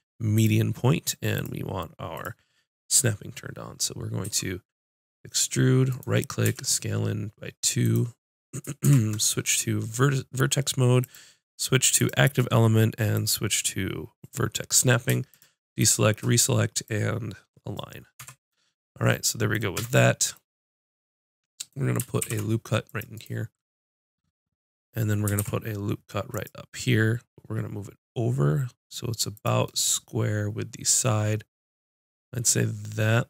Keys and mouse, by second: 4.2 e, 6.4 s, 7.9 click, 8.8 ctrl+Tab, 9.6 click, 11.0-12.3 drag, 12.7-18.1 drag, 18.1 Tab, 19.7 Tab, 22.2 ctrl+r, 25.3 ctrl+r, 29.7-31.2 drag.